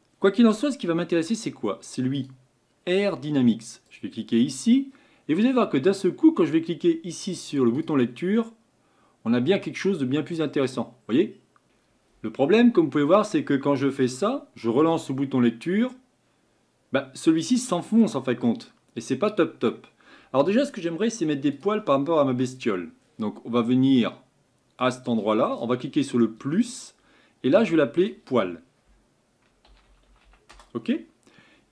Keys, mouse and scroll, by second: 2.1-3.9 drag, 7.7-12.4 drag, 12.4-14.8 middle drag, 14.8-17.8 drag, 17.8-21.5 middle drag, 21.5 click, 22.5 click, 24.8 click, 26.7-31.4 drag.